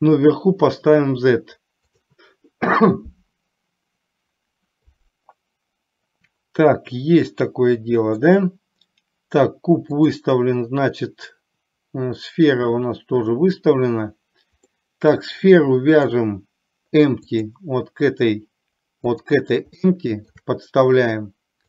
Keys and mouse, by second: 0.2-2.2 drag, 7.4-8.3 middle drag, 14.9 middle click, 16.2 click, 19.2-19.5 drag, 19.9-20.3 shift+middle drag.